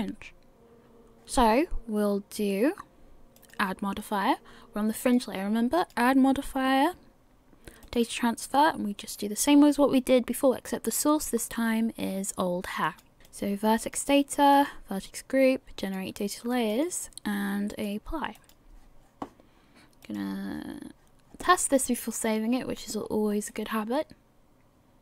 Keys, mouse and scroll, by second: 3.4 click, 11.1 click, 13.3-22.1 click, 23.0 scroll up 2, 23.5 middle click.